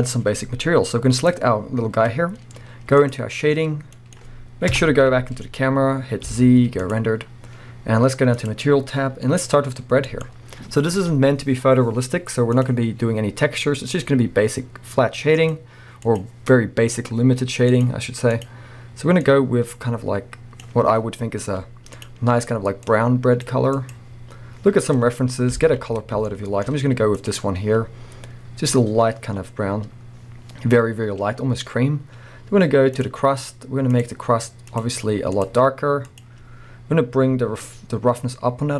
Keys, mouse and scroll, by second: 1.2 click, 1.7-2.2 scroll up 1, 3.3 click, 3.8 scroll down 1, 4.0-5.1 middle drag, 4.8 KP_0, 6.9 z, 13.9 click, 21.0 scroll up 1, 22.8 click, 24.9 scroll down 1, 25.6 alt+a, 26.7 shift+middle click, 28.8 click, 29.4-29.9 scroll down 2, 29.9-32.8 scroll up 2, 33.0-34.7 drag, 37.9-38.7 drag.